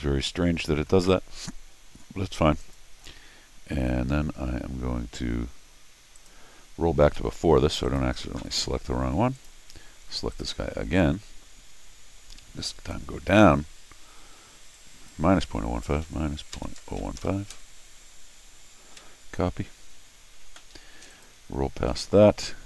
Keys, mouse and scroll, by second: 2.6 click, 6.2 click, 7.0 ctrl+alt+r, 7.8 click, 9.4 click, 10.3 click, 12.7 click, 14.7 click, 20.7 Escape, 21.1 click, 21.8 ctrl+alt+shift+r.